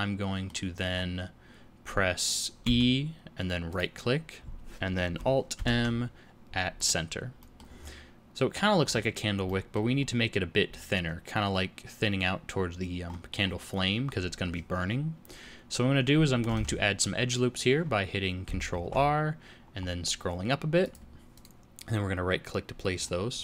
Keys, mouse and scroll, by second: 0.9 scroll up 2, 2.6 e, 5.5 alt+m, 7.4 middle click, 7.7-8.5 scroll down 6, 8.8 scroll up 4, 9.4 middle click, 9.9 scroll up 1, 10.7-11.5 scroll down 4, 13.0-13.6 scroll up 6, 16.5 alt+a, 18.7 ctrl+r, 22.9-23.4 scroll down 8.